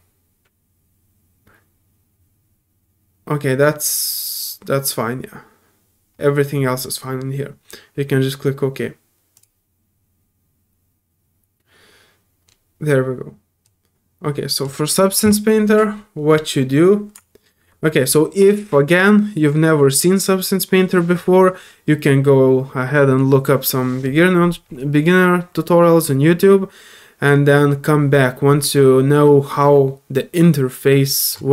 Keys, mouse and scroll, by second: 9.3 click, 9.3 typing, 13.6 click, 16.3 middle click, 16.6 middle click, 30.1-31.3 drag.